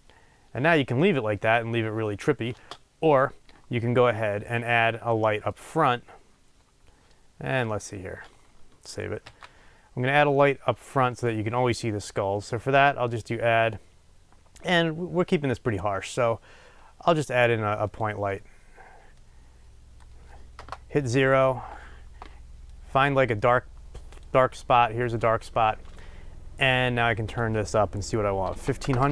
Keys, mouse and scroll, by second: 3.0 space, 5.1 middle click, 5.8-6.2 scroll down 2, 5.9 middle click, 6.3-7.6 middle drag, 7.6 click, 10.2 ctrl+s, 18.1-19.2 drag, 20.6 KP_0, 22.9 click.